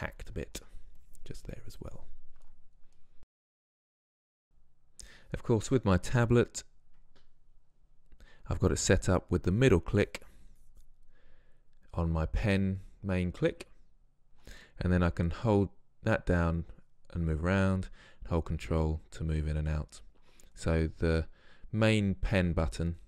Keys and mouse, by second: 0.4 middle click, 1.1-2.2 middle drag, 2.2 click, 2.5 middle click, 3.1 click, 3.2-4.7 middle drag, 9.6-12.4 drag, 15.2 middle click, 15.2 click, 15.4-15.8 middle drag, 16.1 middle click, 16.2 click, 16.3-17.0 middle drag, 18.6-21.1 middle drag, 21.6-22.4 middle drag.